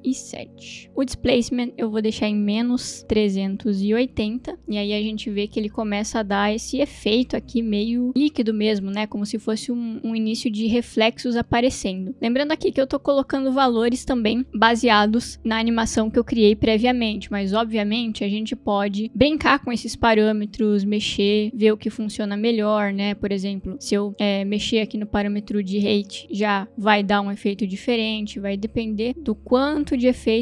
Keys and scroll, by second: 0.0 7, 0.6 Return, 3.0-4.6 typing.